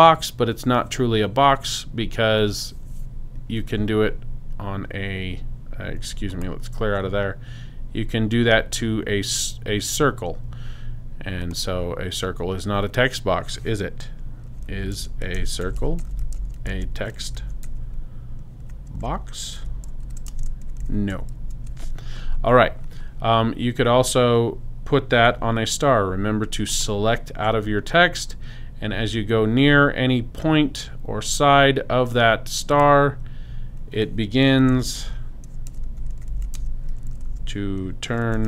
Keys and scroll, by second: 14.3-21.4 typing, 34.4-38.4 typing.